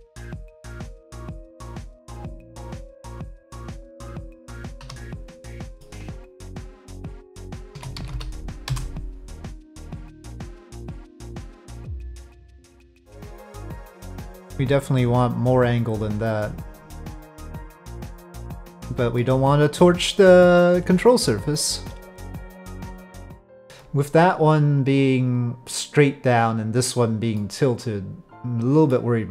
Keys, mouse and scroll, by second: 1.0-2.3 middle drag, 2.9 middle click, 4.8 2, 5.6 middle click, 7.7 s, 10.4-13.1 drag, 13.1 z, 14.9-18.8 drag, 19.3-21.3 middle drag, 22.4 click, 23.2 middle click, 27.3-28.9 middle drag.